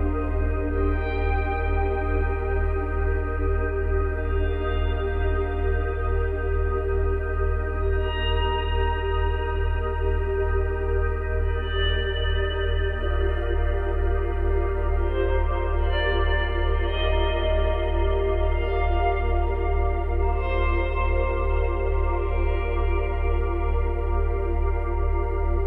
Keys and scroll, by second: 5.9 space, 6.9 space.